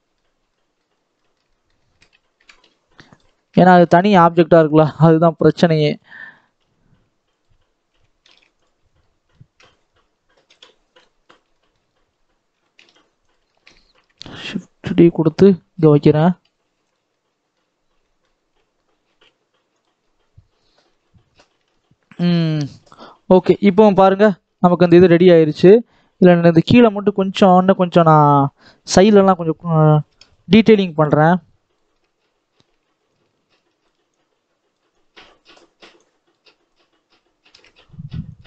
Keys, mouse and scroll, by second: 0.8 scroll up 2, 1.0-2.3 shift+middle drag, 2.3 r, 3.3-4.3 shift+middle drag, 4.3 shift+d, 6.2 r, 7.8 g, 8.7 scroll down 1, 8.9 middle click, 9.5 scroll down 1, 10.4 KP_7, 10.8-11.3 scroll up 5, 11.5 shift+middle click, 11.7-12.4 scroll up 1, 12.4 r, 13.3-14.4 shift+middle drag, 14.4 shift+d, 16.1 r, 16.9-18.1 middle drag, 18.1 scroll down 1, 18.2-18.9 scroll up 1, 19.0 g, 19.9-20.7 scroll down 4, 20.7 click, 20.9 middle click, 21.3 ctrl+s, 22.3 middle click, 22.4 scroll down 2, 22.7-23.8 middle drag, 23.8-24.3 scroll up 5, 24.3 shift+middle click, 25.1-25.7 scroll up 1, 25.7 click, 28.3 click, 29.9 ctrl+KP_7, 30.9 shift+middle click, 31.2 shift+scroll down 1, 31.3-31.6 scroll up 3, 31.6-33.1 shift+middle drag, 33.1-38.4 shift+drag.